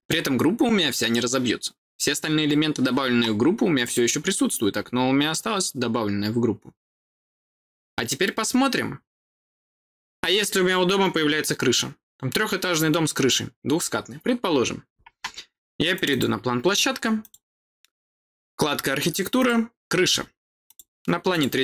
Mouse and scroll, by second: 3.7 click, 7.5-9.5 scroll down 2, 9.5-10.5 scroll down 1, 15.8 click, 17.1 click, 19.3 click, 20.6 click, 21.2 click.